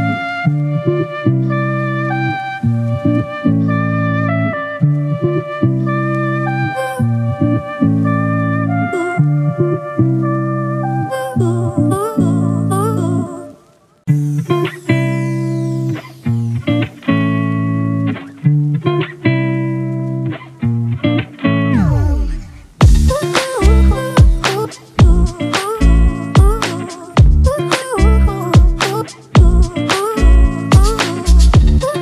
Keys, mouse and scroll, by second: 1.4 typing.